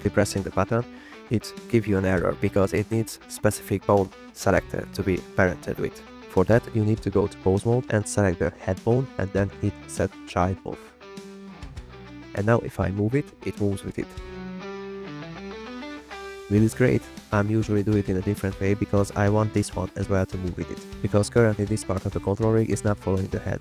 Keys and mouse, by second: 1.6 click, 7.5-8.0 drag, 8.4 click, 8.6 click, 8.9 click, 9.6 click, 10.6 click, 11.5-11.8 drag, 12.1-13.4 drag, 13.7 r, 15.1 r, 15.2 z, 15.6 x, 16.2 drag, 16.4 shift+drag, 16.8 click, 17.0 click, 17.6 drag, 18.2 click, 18.7 click, 19.6 click.